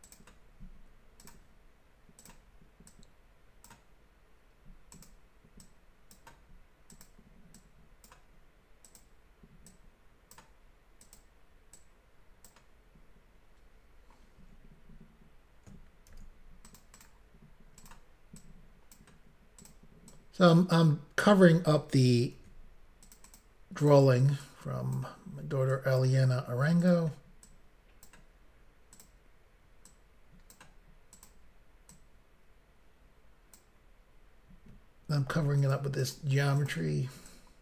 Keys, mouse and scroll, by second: 0.0 click, 0.2 click, 1.2 click, 2.2 click, 2.9 click, 4.9 click, 5.1 click, 5.6 click, 6.9 click, 7.0 click, 7.5 click, 8.8 click, 9.0 click, 9.7 click, 11.0 click, 11.2 click, 11.8 click, 16.1 ctrl+r, 16.7 click, 16.9 click, 17.8 double click, 18.4 double click, 19.6 click, 19.7 click, 20.1 click, 22.4 ctrl+r, 23.0 click, 23.1 click, 23.3 click, 23.4 double click, 23.8 double click, 23.9 double click, 24.4 double click, 25.7 click, 26.8 click, 26.9 click, 27.5 click, 29.0 click, 29.9 click, 31.2 click, 31.3 click, 31.9 click, 35.3 ctrl+r, 35.6 click, 35.8 click, 36.0 click, 36.2 double click, 37.3 double click.